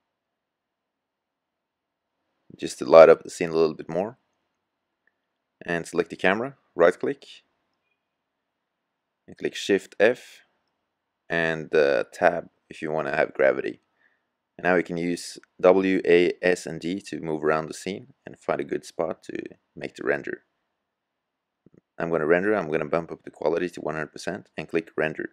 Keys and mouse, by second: 1.0-6.6 middle drag, 7.9-9.4 right drag, 9.4 shift+f, 21.1-22.9 drag.